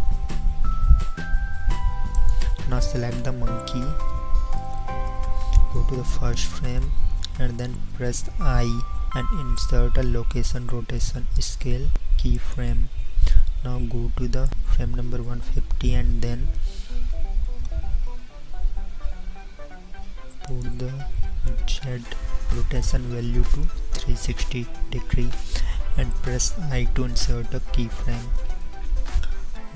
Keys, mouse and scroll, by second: 1.1 g, 8.6 i, 16.6 n, 26.6 i.